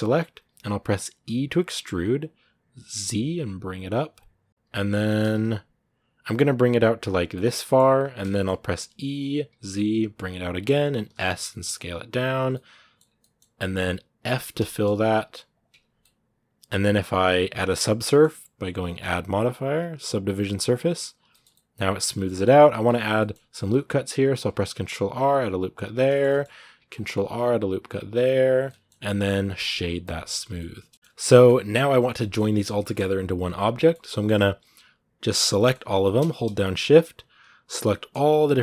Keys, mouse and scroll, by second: 0.0 z, 4.5 middle click, 4.8 g, 7.0 scroll down 1, 7.1 middle click, 7.6-8.1 scroll up 2, 8.1 shift+middle click, 8.5 e, 12.3 middle click, 12.8-14.4 scroll up 4, 13.0 middle click, 14.4 f, 15.6 scroll down 2, 15.8-18.9 middle drag, 20.7 click, 20.9 scroll down 2, 21.1-22.1 shift+middle drag, 22.1-22.5 scroll up 2, 22.2 shift+middle click, 22.6 Tab, 23.0-24.3 middle drag, 24.3 ctrl+r, 25.9 shift+middle click, 26.2 scroll up 1, 26.5 ctrl+r, 28.4-29.9 middle drag, 29.9 w, 30.1 scroll down 2, 30.2 a, 30.4-31.9 middle drag, 31.9 scroll up 1, 32.0-35.1 middle drag, 35.1 right click, 35.3-36.4 middle drag, 36.4 shift+right click, 37.7 middle click, 38.3 shift+right click, 38.4 middle click.